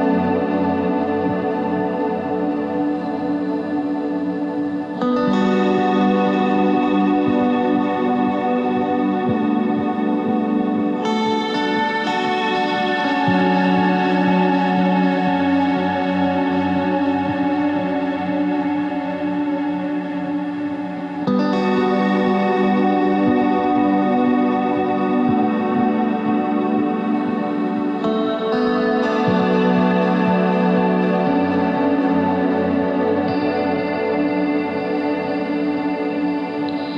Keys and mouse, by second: 0.7 shift+d, 1.9 click, 3.6 Tab, 9.7 e, 11.9 ctrl+Tab, 12.5-13.6 drag, 13.6 ctrl+Tab, 14.1-15.8 drag, 16.0 e, 20.0 e, 21.8 a, 22.0 a, 27.3 ctrl+r, 28.5 a, 28.6 a, 29.4 s, 31.3 click, 32.1 a, 32.2 a, 32.6 s, 34.7 ctrl+Tab.